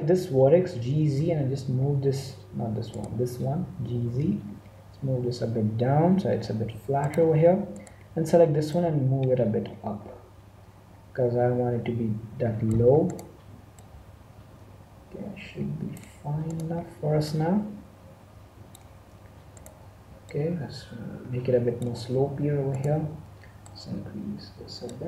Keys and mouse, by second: 0.3 g, 2.8-4.5 right drag, 3.8 g, 7.7-9.3 right drag, 8.6-10.6 drag, 13.0-14.7 right drag, 13.7-15.5 drag, 16.4-18.3 right drag, 17.2-19.0 drag, 19.5-21.4 right drag, 20.3-22.1 drag, 22.6-24.5 right drag, 23.6-25.0 drag, 24.9 Tab.